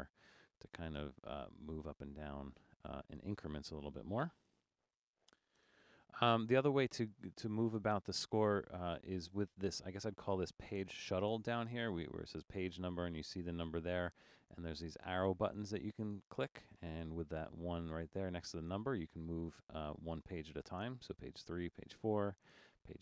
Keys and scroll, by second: 4.5 super+0, 4.5-5.6 typing, 5.7 Return.